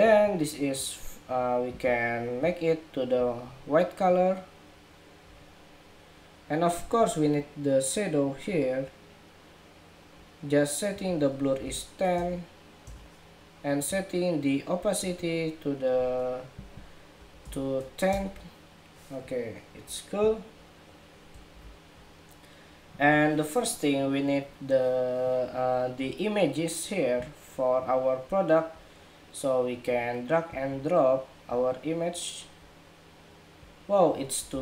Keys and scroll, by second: 21.2 super+=.